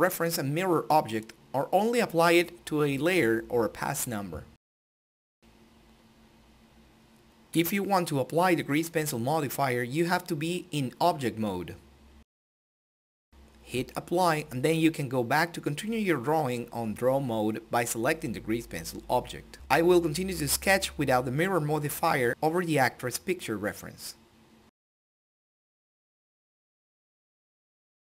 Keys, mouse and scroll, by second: 1.4 click, 2.4-4.3 drag, 4.3-5.6 drag, 5.6-7.5 drag, 7.6 click, 8.7 ctrl+z, 10.0 click, 17.0-19.8 drag, 19.8 shift+middle click, 20.0-21.5 drag, 21.5 shift+middle click, 21.7 click, 21.9 ctrl+z, 22.0 click, 22.8 ctrl+z, 23.3 click, 23.6 ctrl+z, 23.7 click, 24.3 ctrl+z, 24.9 click, 25.0 click, 25.4 click, 25.5 ctrl+z, 25.6 click, 26.5 shift+middle click, 26.7 click, 27.0 click, 27.2 click, 27.5 shift+middle click, 27.8 shift+middle click, 28.0 click.